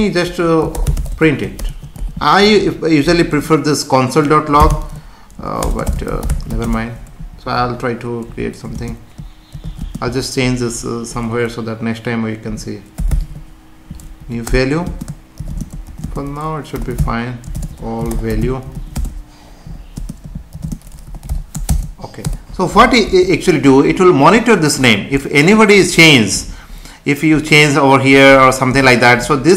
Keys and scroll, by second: 2.4 Left, 5.6 space, 6.6 shift+space, 7.6 Right, 8.7 space, 14.2 Down, 14.4 Return, 14.9 space, 15.5 shift+space, 16.1 space, 18.9 space, 19.6 Right, 19.9 space, 20.6 shift+space, 22.3 Return, 23.1 ctrl+s.